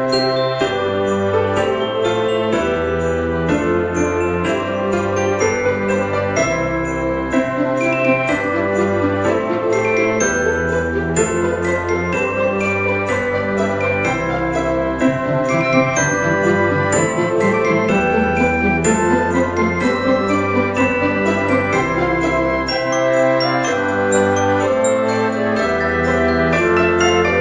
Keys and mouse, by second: 1.0 click, 1.3 g, 2.9 click, 3.5 shift+d, 4.0 click, 5.2 r, 6.0 click, 6.3 r, 7.0 click, 7.1 g, 8.2 click, 8.5 middle click, 9.1 g, 9.3 z, 10.4 click, 11.2 KP_7, 11.9 shift+middle click, 12.4 s, 13.2 click, 13.3 g, 15.3 click, 15.7 middle click, 17.0 click, 18.4 middle click, 19.8 right click, 21.1 click, 22.5 s, 23.6 click, 23.9 z, 26.2 click, 26.6 middle click, 27.3 g.